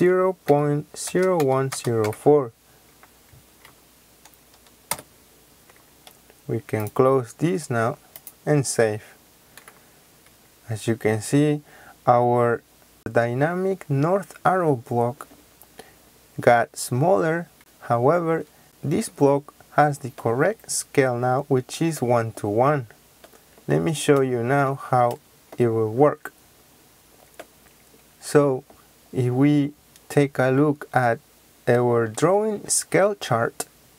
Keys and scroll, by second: 0.4 KP_Decimal, 1.0 KP_0, 1.3 KP_1, 4.8 Return.